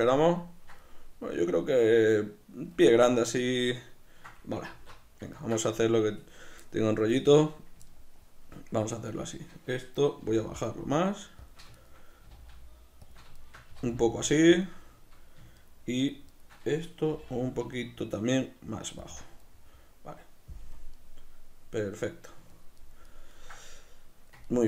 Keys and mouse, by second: 4.7 alt+q, 9.0-10.2 right drag, 10.2 g, 11.5 shift+click, 11.8 shift+right click, 12.2 g, 13.2 shift+click, 13.4 shift+right click, 13.7 g, 14.6 shift+click, 15.6-17.1 shift+right drag, 17.1 g, 19.2 shift+click, 19.5-24.6 middle drag, 20.6 KP_Decimal.